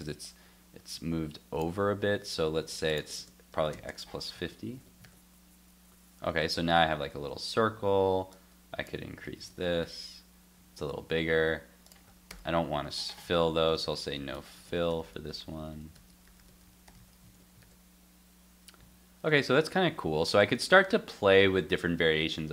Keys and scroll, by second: 1.7 super+Tab, 4.4 super+s, 4.7 super+Tab, 5.0 super+r, 7.2 super+Tab, 9.2 super+s, 9.5 super+Tab, 9.8 super+r, 10.8 super+Tab, 17.0 super+s, 17.2 super+Tab, 17.6 super+r.